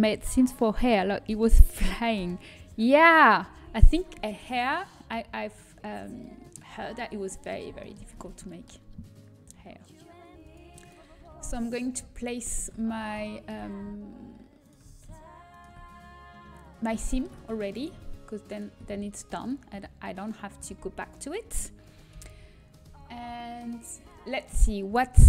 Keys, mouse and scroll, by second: 4.1-6.2 middle drag, 8.1 Tab, 11.9 click, 11.9-13.7 right drag, 15.2-16.9 right drag, 17.5 middle click, 18.7-20.3 right drag, 20.1 click, 20.1 middle click, 20.6 a, 23.7 alt+h.